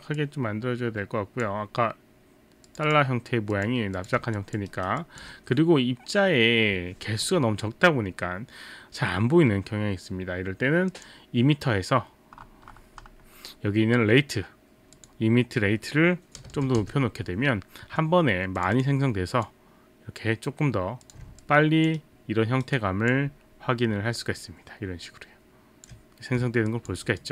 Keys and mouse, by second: 0.1 click, 2.7 click, 2.9 click, 4.0 click, 4.7 alt+right click, 5.1 alt+click, 11.0 click, 15.0 click, 16.4 KP_0, 16.8 Return, 18.6 click, 19.4 click, 21.0 click, 22.0 alt+right click, 22.8 alt+click, 24.2 alt+click, 26.7 alt+click, 27.1 alt+right click.